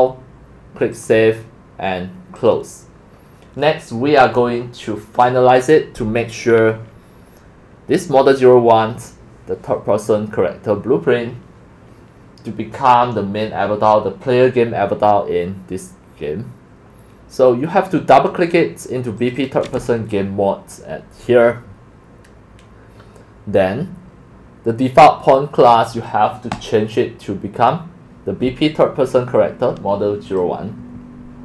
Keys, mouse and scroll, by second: 0.9 click, 2.4 click, 3.9-7.7 drag, 12.0 drag, 19.2 click, 23.9 drag, 26.5-28.2 drag, 30.3 click.